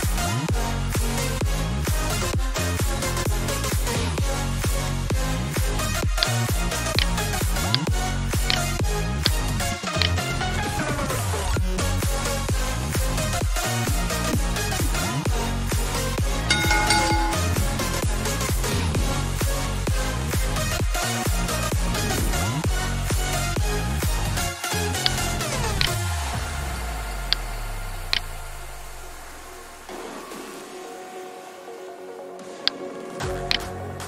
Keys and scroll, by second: 1.1 alt+Tab, 2.8 Tab, 3.3 alt+Tab, 4.9 alt+shift+Tab, 6.8 alt+Tab, 11.9 super+d, 33.1-34.0 typing.